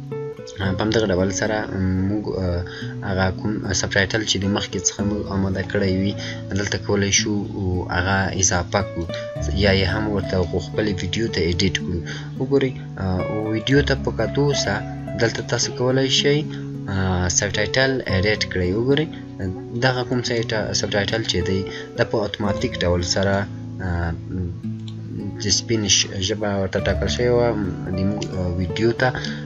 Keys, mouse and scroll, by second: 8.9 click, 13.5 click, 13.9-15.1 scroll down 1, 15.1 click, 15.7 scroll down 1, 16.9 scroll up 1, 18.7-20.0 scroll up 1, 20.0 click, 22.8-24.6 scroll down 1, 24.6 click.